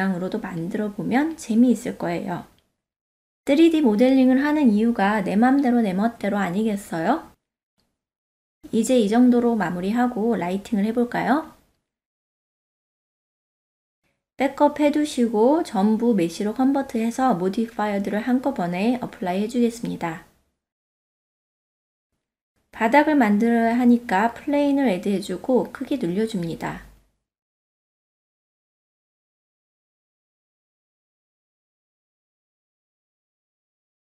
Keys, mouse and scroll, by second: 1.0 alt+q, 2.4 alt+click, 2.6 middle click, 2.9 KP_1, 3.9 s, 3.9-7.3 drag, 7.7 g, 7.8-8.9 drag, 9.5 click, 9.6 ctrl+middle click, 9.7 middle click, 10.7 shift+middle click, 12.2 click, 13.1 Tab, 14.3 click, 15.3 h, 16.3-16.7 drag, 18.7 shift+click, 19.4 q, 20.4 click, 22.7 shift+a, 25.6-26.0 ctrl+middle drag, 26.1-26.5 shift+middle drag, 26.9-27.3 middle drag, 27.4 Tab, 27.8 s, 28.2 click, 29.5 click, 31.3 click, 31.4 click, 32.6-33.1 shift+middle drag, 33.2-34.1 middle drag.